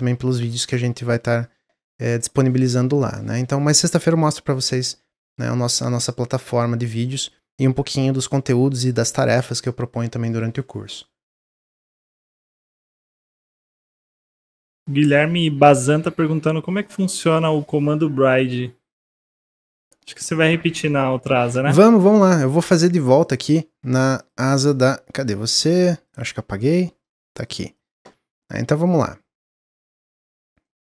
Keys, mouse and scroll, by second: 15.4-18.5 middle drag, 18.9 click, 19.3-19.7 middle drag, 19.7-20.4 scroll up 1, 20.4-21.2 shift+middle drag, 21.2-21.6 scroll down 1, 21.9-23.2 middle drag, 23.2 click, 24.2 click, 25.1 click, 26.0 click, 26.4 click, 27.3 click, 27.7 click, 28.8-30.6 drag, 30.6-30.9 middle drag.